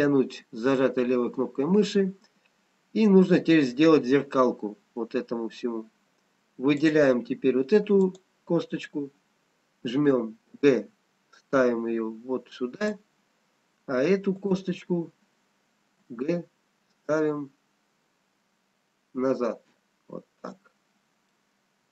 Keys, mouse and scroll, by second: 6.7 click, 8.3 click, 10.7 g, 14.4 click, 16.2 g, 21.4 middle click.